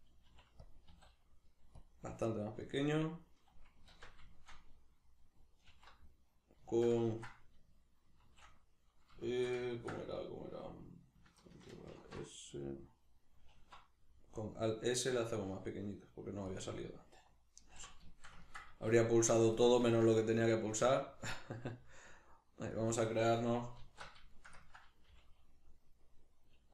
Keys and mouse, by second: 0.3 r, 0.7 click, 0.9 s, 1.9 click, 2.7-16.6 middle drag, 3.9 alt+q, 5.7 alt+t, 8.2 shift+t, 11.9 ctrl+alt+s, 13.5 alt+s, 16.6 click, 17.6 alt+q, 18.1-19.7 shift+middle drag, 18.9 g, 19.7 click, 19.8-22.9 ctrl+middle drag, 20.4 s, 22.9 click, 23.8 alt+q, 24.3-26.7 shift+middle drag, 25.1 g.